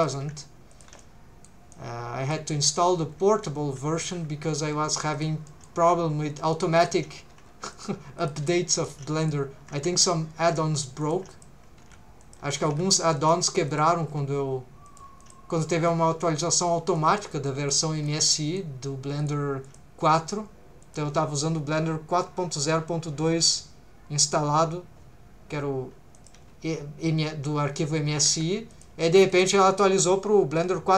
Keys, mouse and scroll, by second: 0.2 g, 0.7 shift+click, 1.0 middle click, 1.7 middle click, 2.6 middle click, 3.3 r, 3.9 click, 4.2 g, 4.5 shift+click, 5.1 click, 5.5 middle click, 5.8 g, 6.8 shift+click, 7.3 g, 7.7 shift+click, 8.2 click, 8.4 g, 8.8 shift+click, 9.2 click, 10.0 shift+v, 10.5 shift+click, 10.7 g, 11.0 shift+click, 11.3 click, 11.8 shift+v, 12.2 shift+click, 12.6 g, 13.2 shift+click, 13.7 click, 14.0 shift+v, 14.9 shift+click, 15.2 click, 15.9 middle click, 16.9 middle click, 17.5 middle click, 18.1 scroll up 1, 18.3 middle click, 19.2 click, 19.6 click, 20.0 g, 20.8 shift+click, 26.1 click, 26.3 g, 28.3 Escape, 28.7 click, 29.3 click.